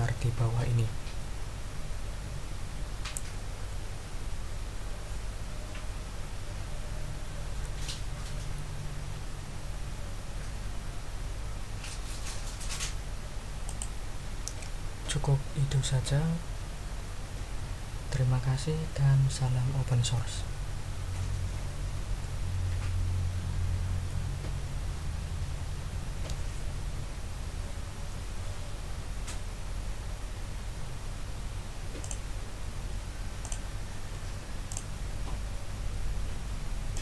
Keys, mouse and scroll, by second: 13.6 click, 25.9 r, 32.0 click, 33.4 click, 34.7 click, 36.9 click.